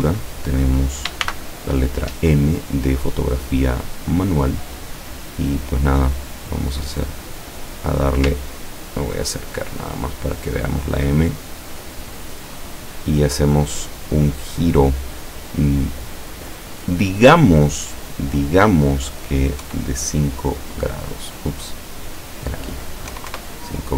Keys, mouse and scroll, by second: 1.3 shift+m, 4.7 click, 6.9 click, 8.5-9.7 ctrl+scroll up 2, 9.7-10.6 ctrl+scroll down 1, 10.6-11.3 ctrl+scroll up 1, 11.4 ctrl+click, 11.7-13.0 middle drag, 19.7 KP_5, 22.0 click, 23.2 KP_5, 23.4 KP_Enter.